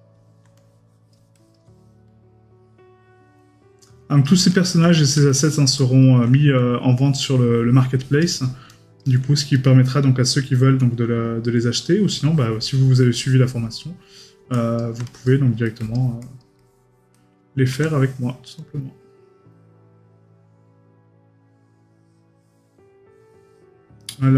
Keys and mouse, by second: 5.3 middle click, 15.6 middle click.